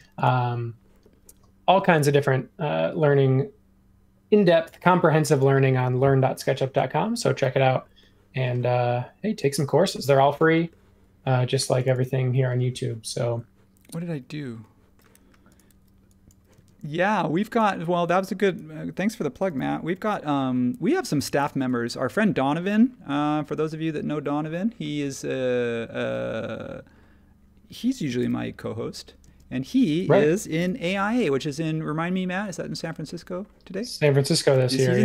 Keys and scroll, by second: 11.6 space, 15.7 e, 16.5 space, 19.4 m, 21.4 e, 23.0 super+z, 25.6 super+z, 28.2 m, 29.2 space, 30.6 m, 34.5 space.